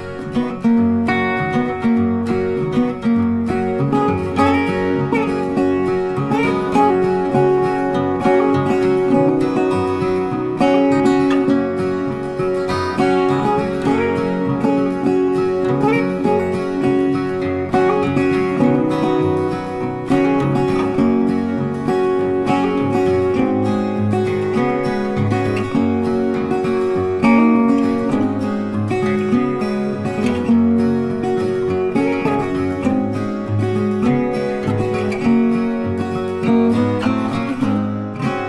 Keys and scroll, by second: 7.4 ctrl+t, 25.2 ctrl+t.